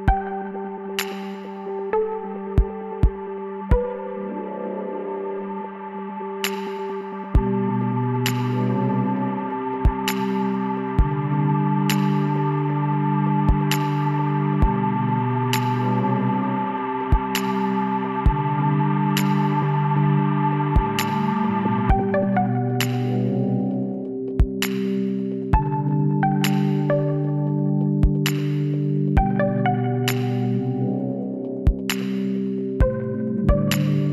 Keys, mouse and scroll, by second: 1.5 x, 3.2-4.8 middle drag, 8.2-10.1 middle drag, 10.4-12.2 right drag, 12.8 c, 15.8-17.7 right drag, 16.6 z, 17.4-18.8 middle drag, 19.8-22.9 middle drag, 22.9 Tab, 23.5 ctrl+z, 24.3-26.0 drag, 27.1-32.7 middle drag, 33.0-34.1 middle drag.